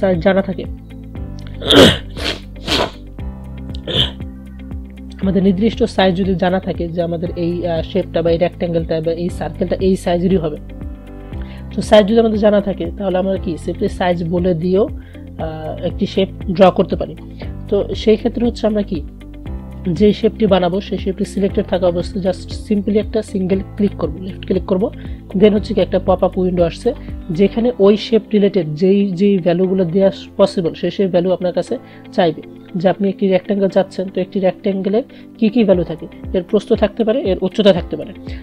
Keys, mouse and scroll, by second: 13.9 click, 20.2 click, 23.9 click, 26.3-38.4 drag.